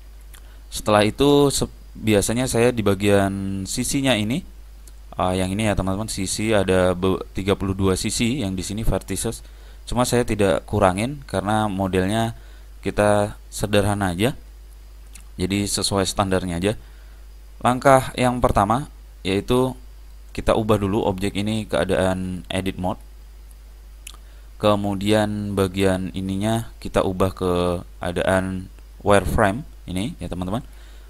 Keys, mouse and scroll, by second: 1.0-2.9 middle drag, 3.8-6.7 middle drag, 12.8-16.2 middle drag, 16.8-18.8 middle drag, 20.2 middle click, 21.9 middle click, 22.3 click, 27.7 click.